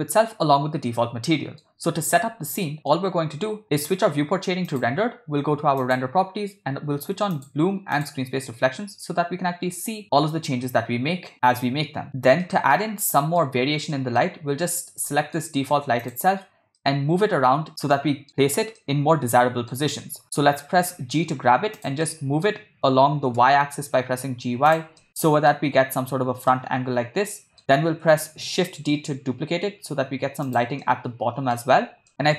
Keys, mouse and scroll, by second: 2.7 middle click, 4.7 click, 5.8 click, 7.6 click, 8.1 drag, 12.5 shift+middle click, 13.0-13.4 middle drag, 14.0 middle drag, 15.2 shift+middle drag, 16.0 click, 16.9-17.7 middle drag, 17.9-18.3 middle drag, 18.9 middle click, 20.9 g, 22.0-22.5 middle drag, 23.3 g, 25.0-25.6 middle drag, 26.5-27.6 middle drag, 28.8 shift+d, 30.8-31.5 middle drag, 32.1 middle click.